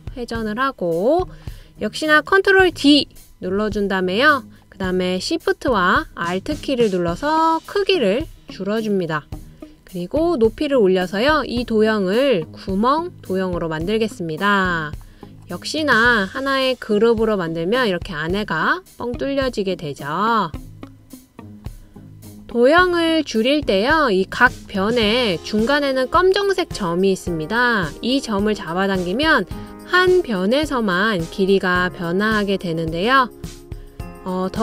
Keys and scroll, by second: 3.0 super+d.